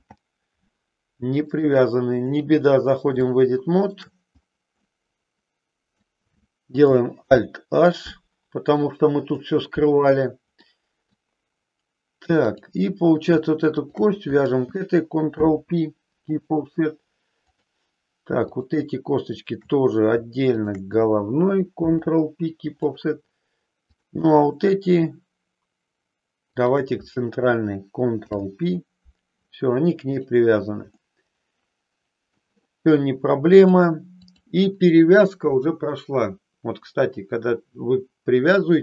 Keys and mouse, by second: 1.6 click, 3.2 shift+middle click, 4.8-5.9 middle drag, 7.2 alt+h, 8.7 middle click, 10.6 middle click, 12.6 click, 13.8 shift+click, 15.3 ctrl+p, 17.4 click, 19.3 shift+click, 21.8 ctrl+p, 23.8 click, 26.6 shift+click, 28.2 ctrl+p, 30.0 click, 30.9-32.3 middle drag, 33.6 click.